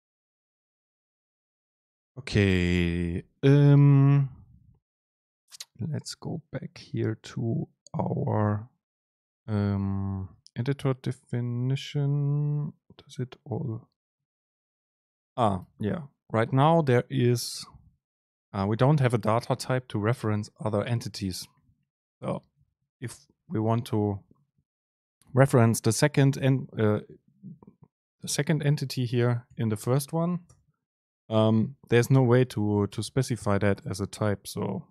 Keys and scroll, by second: 9.3 super+Right, 15.7 Return, 16.0 super+space, 22.2 Up, 22.9 Down, 27.6 Up, 28.2 Up, 28.8 End, 29.0 Home, 29.3 Left, 29.5 Up, 30.2 Return, 30.6 super+space.